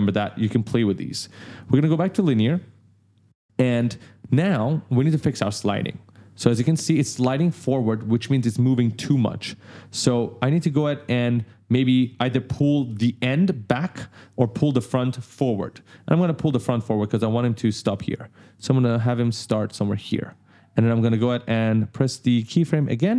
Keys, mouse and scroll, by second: 0.8 right click, 2.2 click, 3.1 click, 4.6 click, 5.7 click, 6.3 space, 8.7 space, 9.7 click, 10.7 click, 18.7 click, 22.6 click.